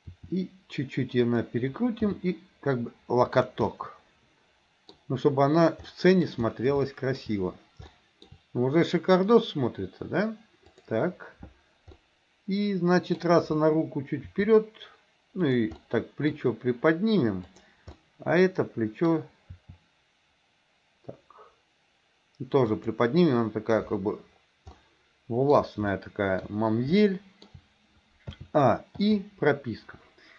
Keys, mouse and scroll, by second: 0.2 r, 2.2 g, 3.7-5.0 middle drag, 5.9 scroll up 2, 6.1 middle click, 6.9 shift+scroll up 2, 6.9 shift+middle click, 7.9 shift+middle click, 10.7 click, 12.1-13.2 middle drag, 14.4 r, 15.9 middle click, 17.5 click, 18.0-19.1 middle drag, 19.6 r, 24.7-25.6 middle drag, 26.0-26.4 shift+middle drag, 27.1 shift+middle click, 28.4 a, 29.1 i.